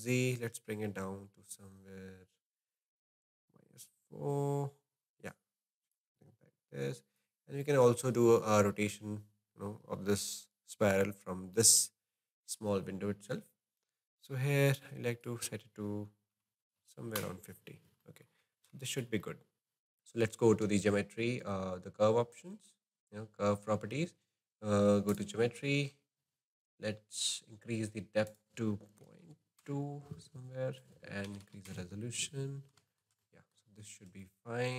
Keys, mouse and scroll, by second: 7.3-10.5 drag, 15.2-18.0 drag, 18.0 middle click, 18.5-18.9 scroll down 2, 18.9-19.9 shift+middle drag, 25.1-26.0 drag, 26.0-28.2 scroll down 3, 28.2-32.5 drag, 32.5-32.9 scroll up 2, 32.9-33.6 shift+middle drag, 33.6-34.2 scroll down 3, 34.2-34.7 middle drag.